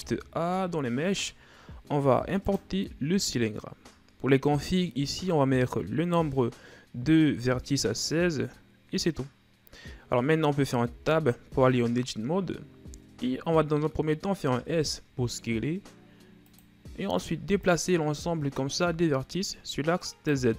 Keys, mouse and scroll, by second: 0.0 shift+a, 10.4-10.9 scroll up 2, 10.9 Tab, 13.2-14.2 scroll down 1, 14.2 scroll down 1, 14.5 s, 17.7-20.5 drag.